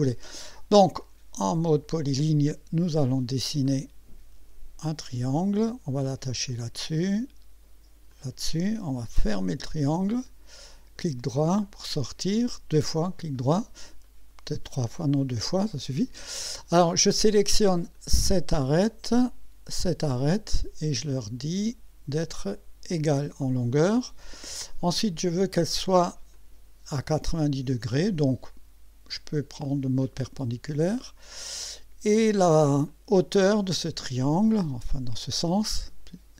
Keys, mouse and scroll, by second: 1.0 click, 3.7 click, 6.5 click, 8.1 click, 10.1 click, 11.6 right click, 12.3 right click, 14.0 right click, 15.0 click, 18.0 click, 19.7 click, 22.1 click, 25.3 click, 26.4 click, 29.1 click, 30.8 scroll up 2, 32.9 click, 34.5 click.